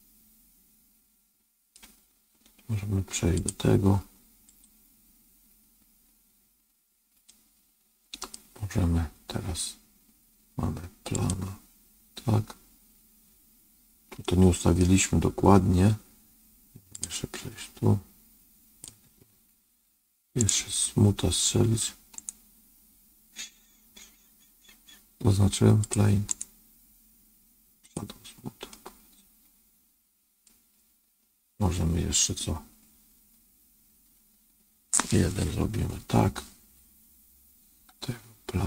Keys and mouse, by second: 3.3 click, 4.5 click, 7.2-8.2 middle drag, 11.0 click, 14.1 middle click, 16.9 click, 18.7-20.4 drag, 20.4 right click, 22.2-25.0 right drag, 25.8 click, 26.3-27.9 right drag, 28.6-30.4 middle drag, 35.6 KP_1.